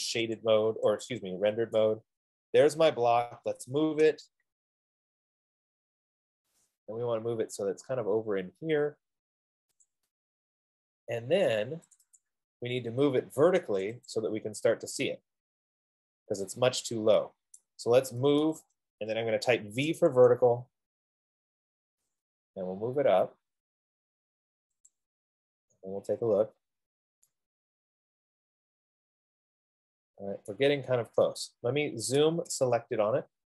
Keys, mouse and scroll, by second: 0.8 click, 4.0 typing, 4.5 Return, 7.2 click, 7.4 typing, 10.1 click, 12.5 click, 12.7 click, 14.1 click, 14.5 click, 17.8 right click, 18.5 typing, 18.8 Return, 19.8-20.6 typing, 22.4 click, 25.1 click, 25.9-26.4 scroll, 26.9 scroll, 31.0 right click, 31.4 scroll, 32.4-33.5 typing.